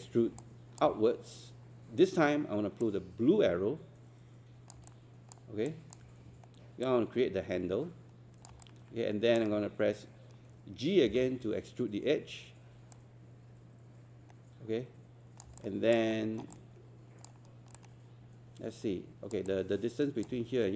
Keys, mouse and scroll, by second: 0.4 alt+click, 2.8-4.7 drag, 5.7 alt+click, 6.8 click, 8.6 alt+click, 11.1 g, 13.0-15.5 drag, 15.6 alt+click, 16.1 alt+middle click, 16.6 alt+click, 17.8 alt+click, 19.5 alt+click.